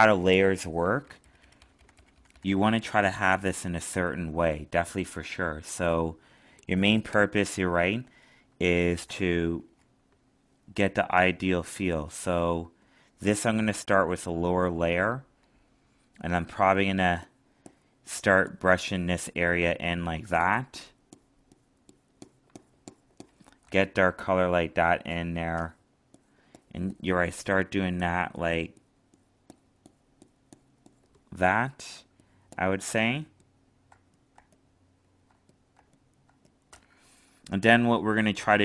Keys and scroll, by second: 23.6 alt+space, 33.2 alt+space.